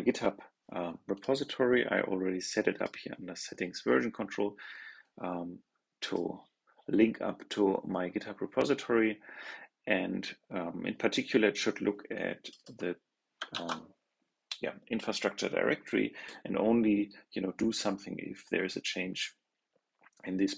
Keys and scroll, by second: 13.4 super+c.